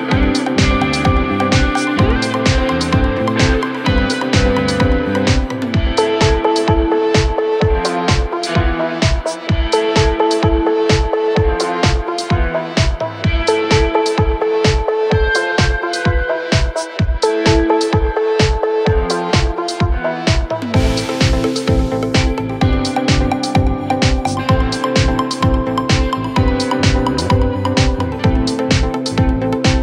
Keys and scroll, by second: 9.9 Delete, 20.6 4, 21.1 3, 25.3 ], 27.6 ].